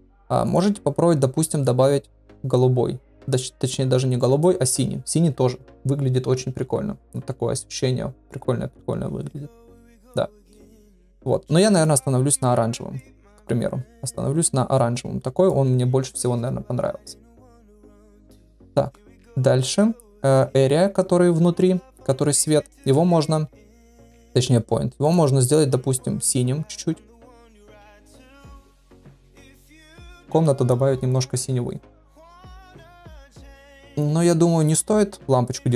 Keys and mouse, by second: 0.4 click, 19.2 click, 22.8 click, 25.0 click, 35.4 click.